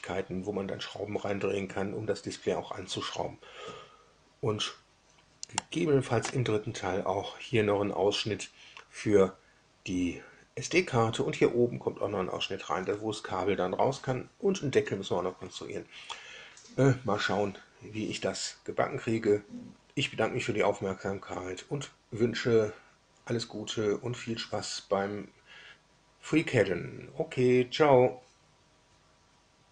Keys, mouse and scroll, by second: 5.5-6.3 drag.